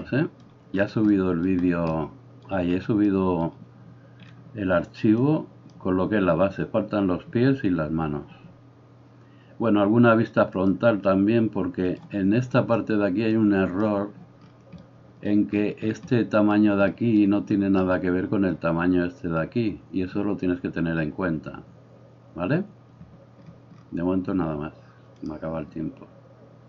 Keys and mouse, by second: 5.3-10.7 drag, 11.9-26.6 drag.